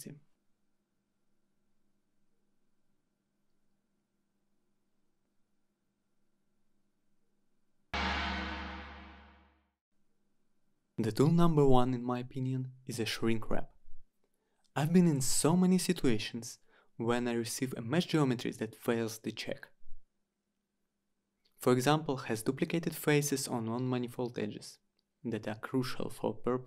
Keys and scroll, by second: 2.6 Return, 5.9 Return, 12.7-13.6 typing, 13.7 Return, 16.9 Return.